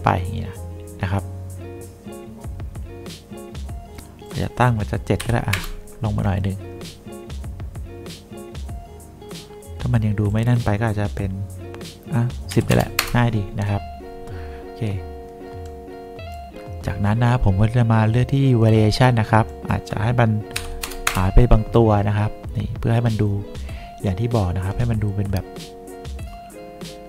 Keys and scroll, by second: 5.3 7, 5.6 Return, 12.6 1, 12.8 0, 13.1 Return, 20.7 5, 21.0 0, 21.2 Return.